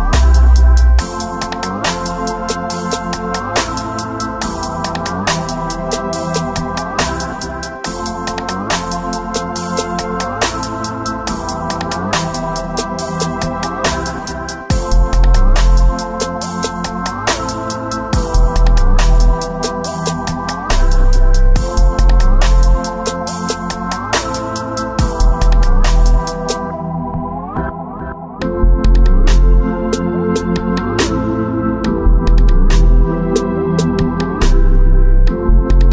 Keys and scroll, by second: 13.9 alt+space, 18.2 ctrl+0, 21.5 space, 23.0 space, 23.4 space, 23.5 ctrl+z, 26.8 [, 29.2 space, 29.5 space, 29.9 ctrl+z, 30.4 ctrl+z, 32.1 space, 33.1 ctrl+alt+s, 34.0 ctrl+z, 34.3 space, 34.9 space, 35.5 ctrl+z.